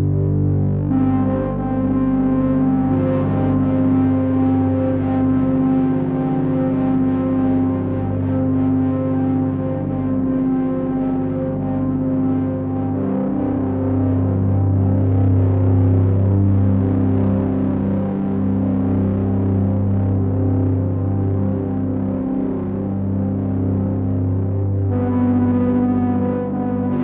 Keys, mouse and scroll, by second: 0.1 ctrl+a, 4.3 ctrl+a, 4.3 ctrl+a, 9.3 click, 10.6 ctrl+a, 19.0 middle click, 23.3 click.